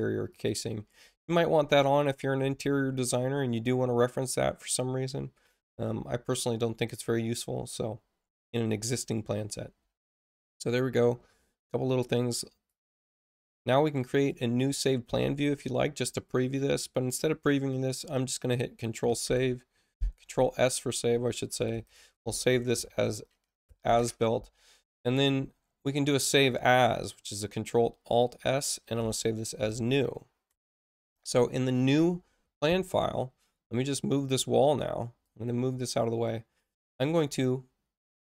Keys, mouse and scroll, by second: 0.3 click, 2.7 click, 12.6 click, 14.1 click, 19.2 ctrl+s, 21.8 shift+a, 24.9 click, 26.3 click, 28.9 F1, 29.5 shift+n, 34.1 right click, 35.2 click.